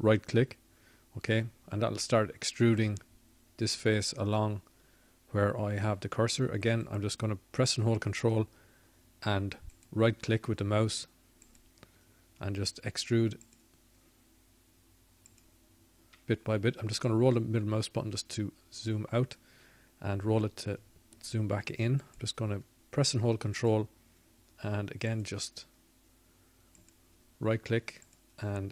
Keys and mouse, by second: 5.6-7.3 drag, 12.6-22.6 drag, 22.6 middle click.